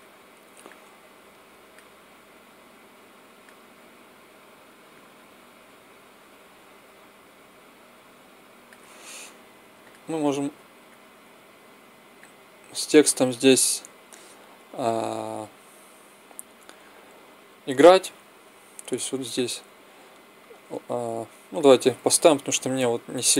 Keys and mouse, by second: 0.6 click, 1.3-2.4 drag, 4.8-6.6 drag, 9.7-13.9 drag, 19.3-22.2 drag, 22.7-23.3 drag.